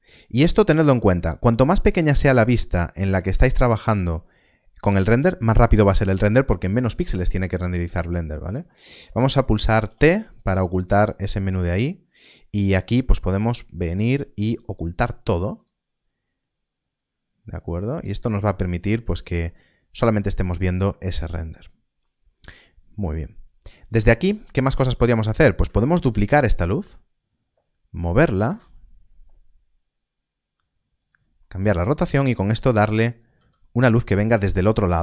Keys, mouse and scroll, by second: 3.1 click, 9.8 click, 13.0 t, 14.6 click, 18.3 click, 23.1 middle click, 24.1 shift+middle click, 24.5-24.8 scroll down 1, 24.9 shift+middle click, 25.9 shift+d, 27.9 click, 30.9 click, 31.4 middle click, 33.0 r, 33.0 click, 34.3 click, 34.8 r.